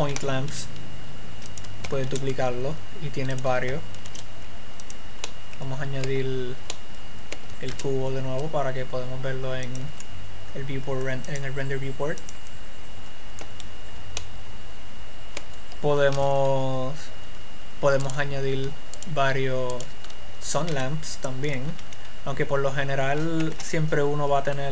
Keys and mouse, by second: 0.9 g, 2.5 shift+d, 3.9 click, 4.5 shift+d, 5.7-7.0 drag, 7.2 click, 8.1 shift+a, 16.7 shift+middle click, 17.0 shift+z, 18.4-20.2 right drag, 21.1 x, 22.2 1, 23.9 KP_1.